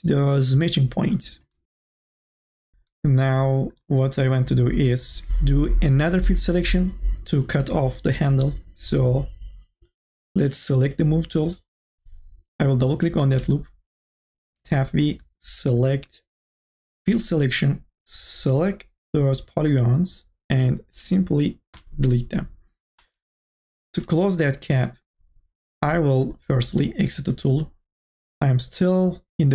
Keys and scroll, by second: 14.6 v, 21.7 Delete.